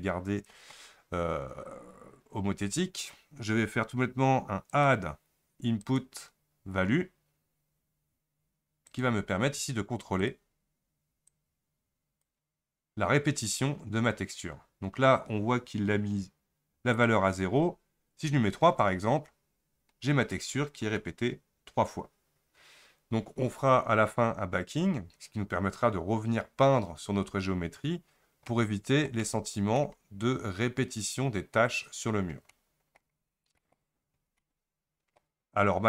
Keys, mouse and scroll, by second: 11.3-14.4 drag, 18.8-27.8 drag, 27.8-28.3 scroll up 3, 28.3 scroll down 2, 28.5-30.1 middle drag, 30.1-30.5 scroll up 1, 32.1-32.5 scroll down 3, 32.5-35.8 middle drag.